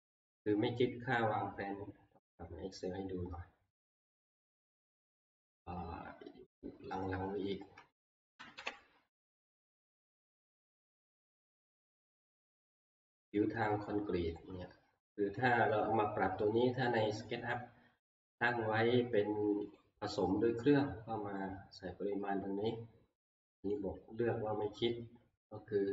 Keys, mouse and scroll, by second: 4.2 click, 7.0 click, 8.1 ctrl+Page_Down, 8.4 ctrl+Page_Down, 8.6 ctrl+Page_Down, 11.2 ctrl+Page_Down, 13.1 click, 16.2-18.2 drag, 19.8-25.9 drag.